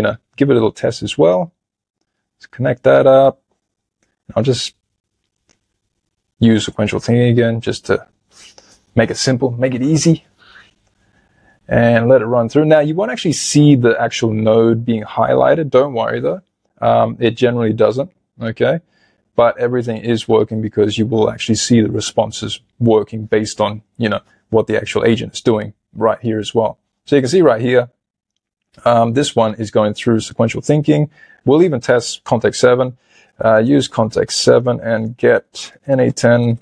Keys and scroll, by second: 35.1 BackSpace.